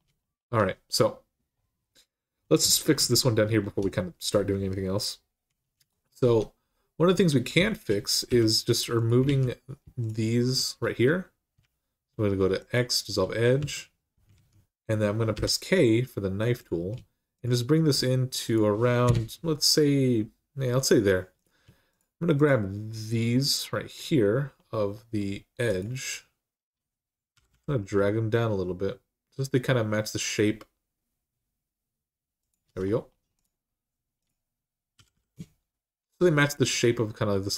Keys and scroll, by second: 6.0 Tab, 6.9 Tab, 8.1 2, 9.0 alt+z, 11.4 x, 13.4 1, 14.1 alt+z, 15.1 k, 18.8 Return, 27.1 g, 27.3 g, 34.7 typing.